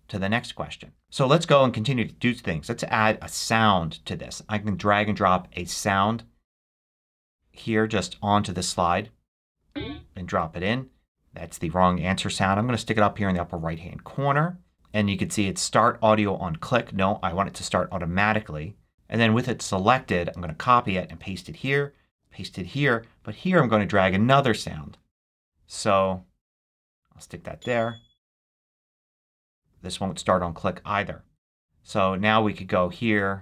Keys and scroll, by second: 20.2 super+c, 21.0 super+v.